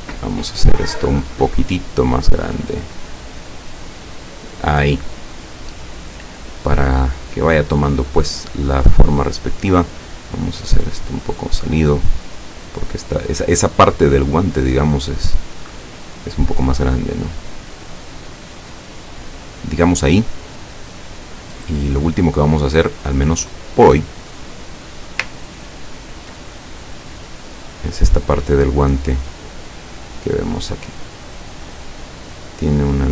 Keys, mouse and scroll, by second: 2.1 click, 10.4 click, 12.3 click, 14.6-16.3 drag, 16.9 click, 21.8 click, 25.5-26.1 ctrl+scroll up 4, 30.3 click, 32.9 click.